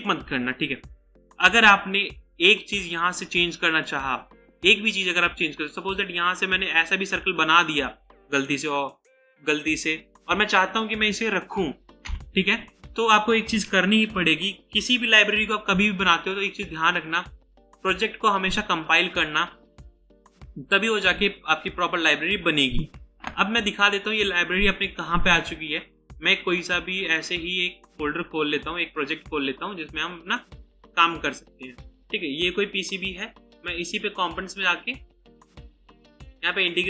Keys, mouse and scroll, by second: 7.1 right click, 12.0 Delete, 16.6 ctrl+s, 18.4 right click, 32.0 double click.